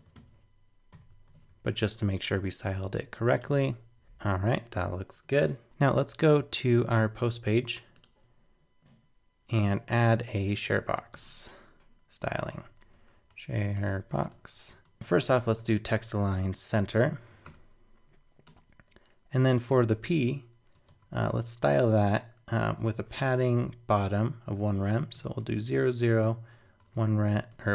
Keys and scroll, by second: 0.1 super+Left, 0.9 super+v, 1.3 super+Right, 1.9 alt+super+., 2.3 super+s, 2.6 super+Tab, 3.4 super+r, 5.6 super+Tab.